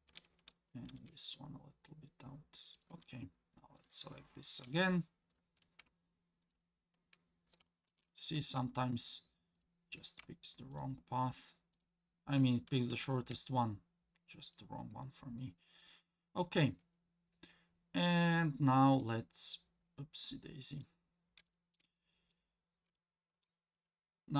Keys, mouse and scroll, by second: 0.5 click, 0.9 g, 3.8 click, 4.8 shift+click, 5.3 shift+click, 6.4 ctrl+click, 7.9 ctrl+z, 9.5 shift+click, 10.7 ctrl+click, 11.7 ctrl+click, 13.6 shift+click, 15.4 shift+click, 19.0 middle click, 19.8 scroll down 2, 20.7 middle click, 21.1 scroll down 2, 21.5 shift+middle click, 21.9 middle click, 22.5-22.9 scroll up 2, 23.0 shift+middle click.